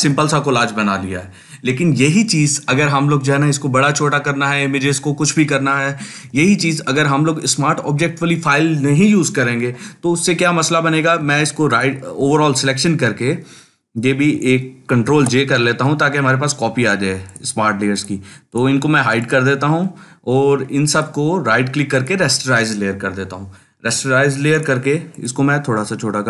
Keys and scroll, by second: 14.9 ctrl+j.